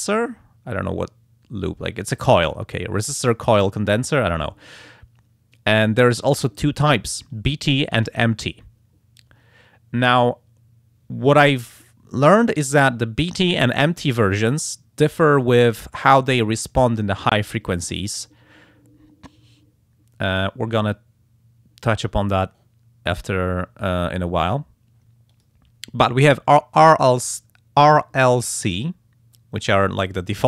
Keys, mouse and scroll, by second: 16.0 click, 25.3 click.